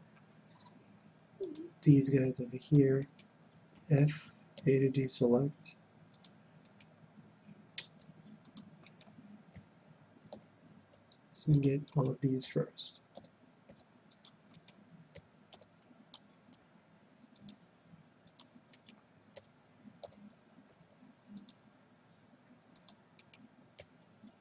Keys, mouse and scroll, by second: 3.1-5.0 right drag, 3.7 f, 4.5 a, 5.2 c, 6.7-8.6 right drag, 7.9 c, 8.9-10.7 right drag, 9.5 f, 10.3 a, 10.9 c, 12.0-13.9 right drag, 12.6 f, 13.1 a, 13.9 c, 14.5-16.4 right drag, 15.3 f, 15.5 a, 16.5 c, 18.8-20.6 right drag, 19.3 f, 20.0 a, 20.6 c, 23.3-24.4 right drag, 23.8 f.